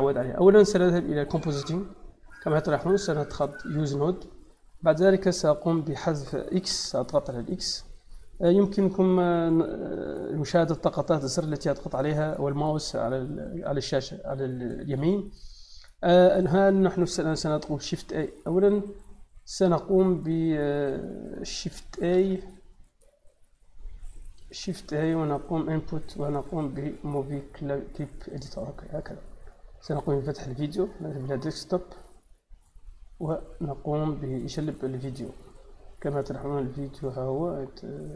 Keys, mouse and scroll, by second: 1.1 click, 3.6 click, 4.6 click, 5.3 click, 5.8 click, 6.6 x, 7.5 click, 9.9 click, 15.6 click, 17.0 click, 17.7 shift+a, 18.3 click, 22.0 shift+a, 23.4 click, 24.5 shift+a, 28.2 click, 28.8 click, 29.8 click, 31.0 click.